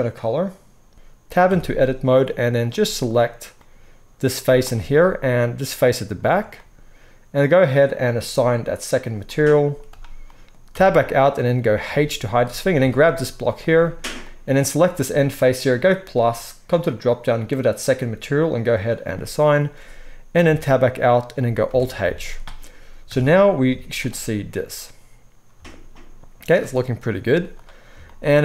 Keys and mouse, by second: 1.4 Tab, 2.5 click, 3.1-8.2 middle drag, 4.4 z, 8.2 click, 8.4-8.9 middle drag, 8.9-12.5 drag, 9.6 z, 10.7 Tab, 11.8 h, 12.5-13.6 middle drag, 12.8 Tab, 13.6 click, 13.7-15.9 middle drag, 15.9-28.4 drag, 20.4 Tab, 21.6 alt+h, 22.0 alt+a, 23.1 KP_0, 23.6 z, 27.2 z.